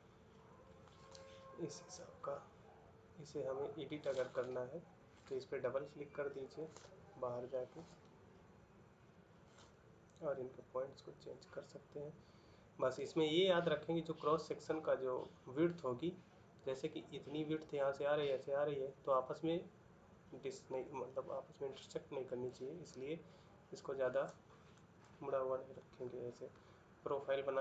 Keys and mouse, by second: 27.4 middle click.